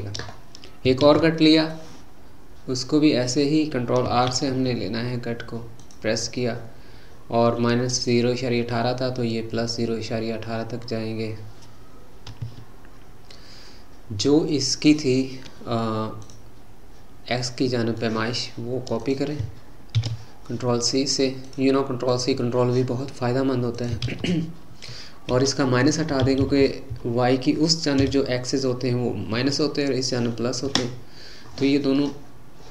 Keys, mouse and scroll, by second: 1.0 ctrl+r, 16.2 click, 17.3-19.0 middle drag, 19.0-21.6 drag, 22.1 click, 23.7-26.4 drag, 26.4 Left, 26.9 Left, 31.9-32.7 middle drag.